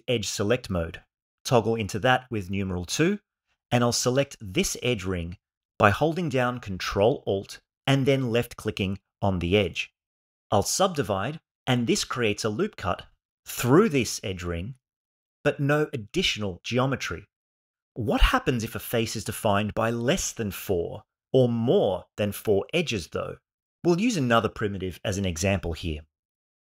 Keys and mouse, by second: 0.6 2, 4.1 click, 7.7 ctrl+alt+click, 10.2 ctrl+e, 15.0 alt+z.